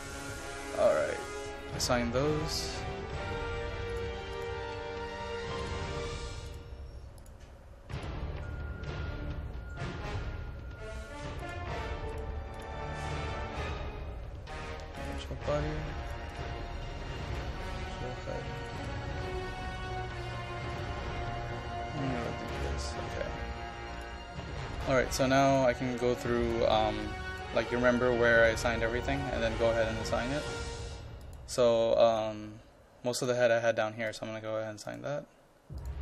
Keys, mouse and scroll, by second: 29.2-31.3 scroll up 1, 31.3-33.8 drag.